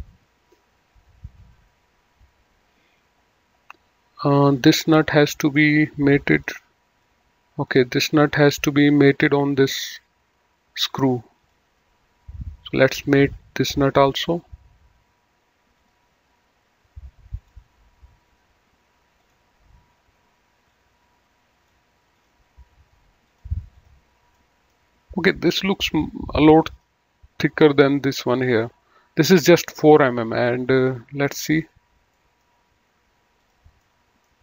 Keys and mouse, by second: 4.8 click, 6.3 click, 11.4 click, 13.7 click, 15.7 click, 17.2 click, 19.2 click, 20.6 click, 22.1 click, 24.3 middle click, 26.7 click, 30.6 click, 32.1 middle click, 33.4 click, 33.8 middle click.